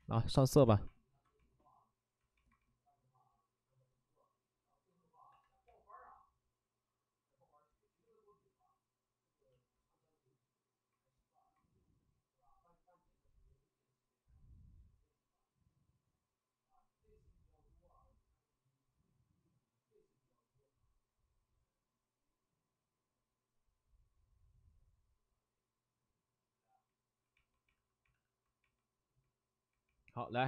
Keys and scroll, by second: 0.6 2, 5.2 c, 26.9 alt+s, 27.6 alt+s, 28.0 alt+s, 28.2 alt+s.